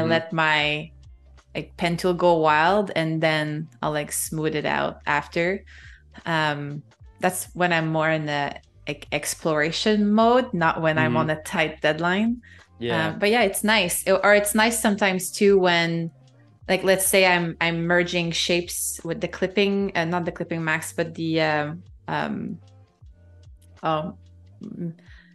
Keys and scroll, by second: 0.0 space, 1.7 -, 6.8 a, 12.1 super+-, 12.9 space, 16.0 space, 17.2 super+=, 17.5 space, 18.2 super+-, 19.3 space, 22.9 super+-, 23.1 space.